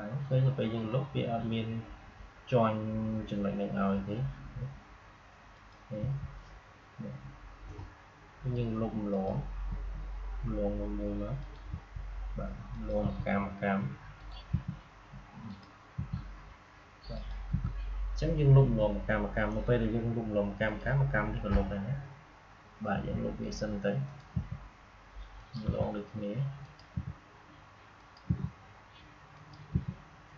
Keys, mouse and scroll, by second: 5.4 click, 5.9 Delete, 9.0 click, 9.6 Delete, 11.3 click, 11.6 Delete, 12.6 click, 12.9 Delete, 14.1 click, 14.4 Delete, 15.4 click, 15.9 Delete, 17.0 click, 17.4 Delete, 20.6 click, 22.8 Delete, 24.0 click, 24.2 Delete, 25.2 click, 25.6 Delete, 26.5 click, 26.8 Delete, 27.9 click, 28.2 Delete, 29.2 click, 29.6 Delete.